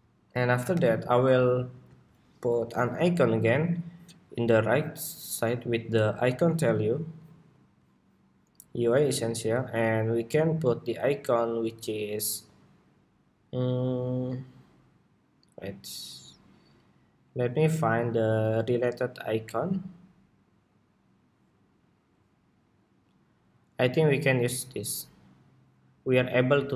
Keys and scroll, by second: 0.3 super+=, 1.4 super+s.